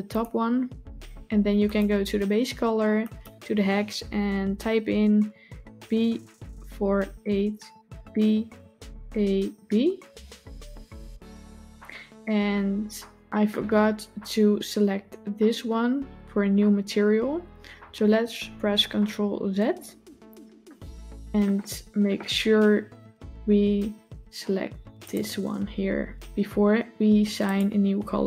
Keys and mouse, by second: 1.6 click, 19.2 ctrl+z, 20.5 click, 25.0 click, 27.3 click.